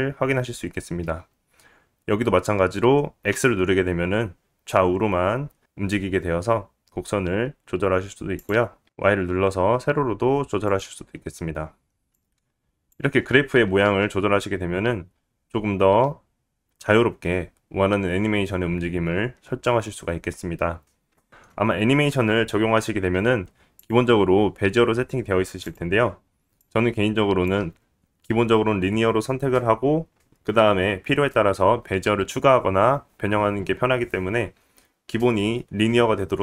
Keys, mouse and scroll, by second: 9.8 g, 13.4 click, 14.9 space, 22.8 click.